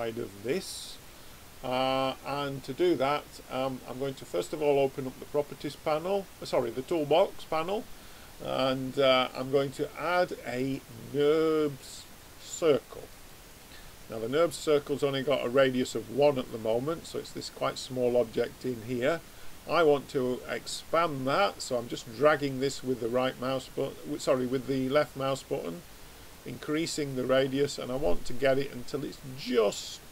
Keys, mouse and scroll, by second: 4.0-7.5 drag, 9.2 click, 16.6-17.8 middle drag, 18.8-21.0 middle drag, 21.0 click, 24.3 click, 27.9 click.